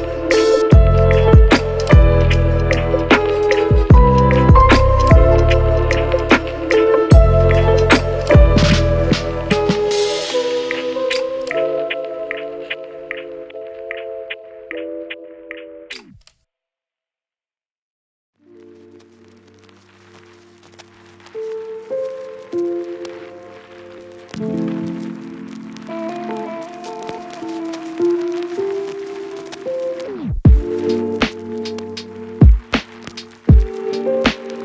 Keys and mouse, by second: 0.2-2.0 shift+middle drag, 1.2 Tab, 2.0 alt+Tab, 2.6-3.7 shift+middle drag, 3.5 shift+z, 3.8 ctrl+shift+click, 3.8 shift+z, 4.1 ctrl+r, 4.4 Tab, 4.7 Tab, 4.9 ctrl+z, 4.9 ctrl+click, 5.1 ctrl+z, 5.6 Tab, 5.8 Tab, 6.0 Tab, 6.1 u, 7.1-8.1 drag, 7.1-9.1 middle drag, 7.1-8.1 right drag, 7.7 KP_0, 8.1 Tab, 8.3 Tab, 8.4 a, 8.5 3, 9.1 Tab, 9.1 alt+click, 9.5 alt+shift+click, 9.7 alt+shift+click, 10.3-11.3 shift+middle drag, 10.8 ctrl+z, 11.5 a, 11.8 alt+shift+click, 12.4 middle click, 13.0 middle click, 14.1 Tab, 14.1 click, 14.3 a, 14.3 middle click, 15.3 Tab, 15.7-17.1 typing, 16.6 Tab, 17.8 shift+middle click, 18.2 Tab, 18.4 Tab, 18.8 middle click, 19.1 ctrl+b, 19.7 alt+e, 20.6 alt+click, 20.9 q, 21.1 alt+click, 21.3 alt+shift+click, 21.6 Tab, 22.0 middle click, 22.0 a, 22.4 shift+click, 23.3 middle click, 23.9 shift+click, 25.0 Tab, 25.2-26.4 shift+middle drag, 26.6 Tab, 27.5 alt+shift+click, 28.8 Tab, 28.8-29.8 middle drag, 28.9 u, 29.8 Tab, 30.0-31.6 typing, 30.7 Tab, 31.1 shift+middle click, 31.4 shift+middle click, 31.7 shift+middle click, 33.1 shift+middle click, 33.3 shift+middle click, 33.6 Tab, 33.8 shift+middle click, 33.8 shift+z, 34.1 ctrl+r, 34.2 click.